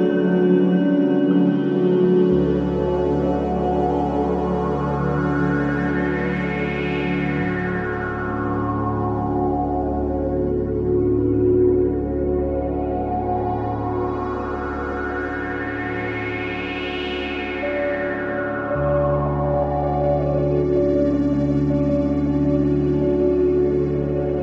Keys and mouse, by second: 0.3 ctrl+z, 1.0 Tab, 3.2 shift+a, 5.5 g, 7.2-9.2 drag, 8.2 s, 9.5 click, 9.6 g, 11.1 g, 14.1 r, 17.8 click, 17.9 s, 19.9-22.1 drag, 20.0 g, 22.5 click, 22.9 r, 24.0 click.